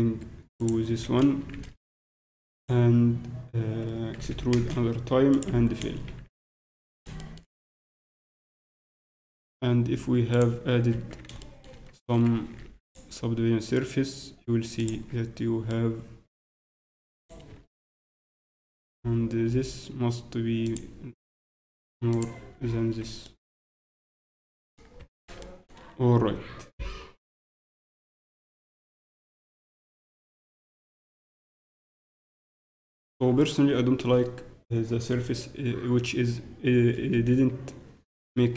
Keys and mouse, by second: 0.9 s, 4.1 e, 5.5 f, 5.7 middle click, 6.1 z, 6.6 Tab, 10.3-12.2 ctrl+drag, 10.9 ctrl+Tab, 14.9 ctrl+Tab, 15.7-17.2 middle drag, 17.2-19.8 right drag, 20.8-24.3 drag, 22.5 t, 23.2-24.3 right drag, 24.3 middle click, 25.0 Tab, 27.6 z, 29.0 z, 29.4 z, 29.7 z, 36.4 middle click, 37.1 z.